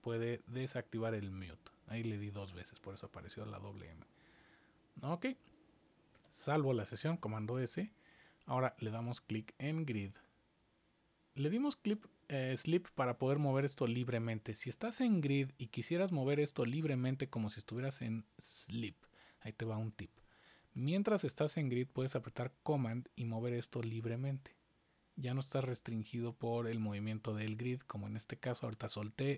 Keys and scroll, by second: 6.1 super+s.